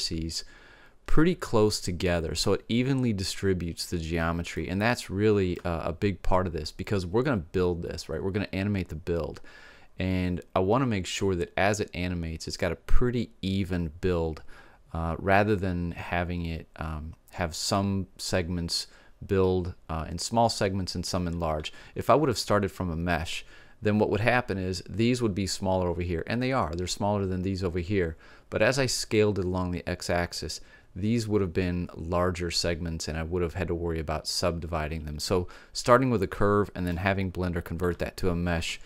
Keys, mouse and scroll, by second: 4.7-6.6 middle drag, 36.3-38.8 middle drag.